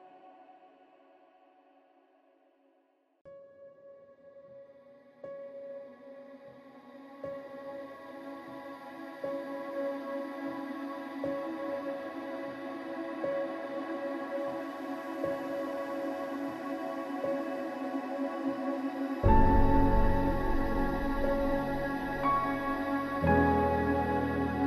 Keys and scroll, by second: 8.0 ctrl+i.